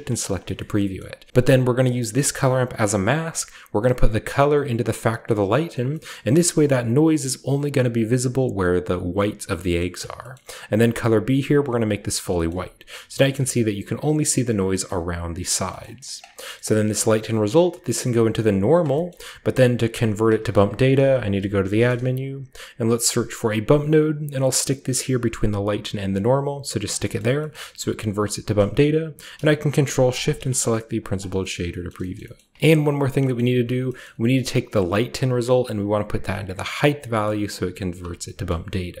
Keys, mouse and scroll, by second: 0.0 click, 0.8 scroll down 2, 0.9-1.3 scroll up 2, 1.9 click, 3.7-5.1 drag, 5.4 click, 6.1-9.5 middle drag, 9.7-11.0 scroll up 1, 9.7-10.1 middle drag, 10.3 middle click, 11.0 click, 11.0-11.7 scroll up 1, 12.4-13.3 shift+middle drag, 13.4-14.6 shift+middle drag, 14.8 middle click, 15.8 middle click, 16.0-19.1 drag, 16.3-17.4 scroll down 1, 16.5-18.7 middle drag, 19.5 middle click, 20.7-21.7 typing, 20.8 middle click, 21.6-23.9 drag, 24.0-26.8 drag, 27.2-28.0 scroll down 2, 28.0 click, 28.3-29.3 scroll down 1, 30.1 ctrl+shift+click, 30.5 click, 31.4-31.9 middle drag, 32.1 shift+middle click, 32.3 middle click, 32.7-33.2 scroll up 2, 33.3-33.8 middle drag, 33.4-34.7 scroll up 1, 34.0-34.7 middle drag, 34.7 drag, 35.1 click, 35.9-36.8 drag, 37.4 click, 38.4-39.0 drag, 38.5-39.0 middle drag, 38.5-39.0 scroll down 1.